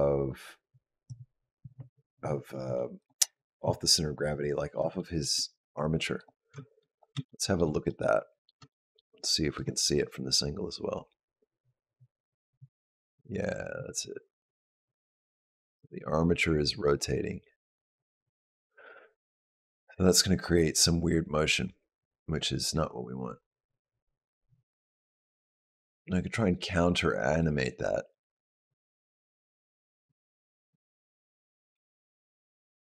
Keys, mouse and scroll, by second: 2.8 click, 4.4 scroll up 2, 4.8 shift+middle click, 5.4-5.8 scroll up 2, 6.0 click, 6.7 click, 7.1 shift+middle click, 7.7 middle click, 8.5 shift+middle click, 9.2 middle click, 10.1 click.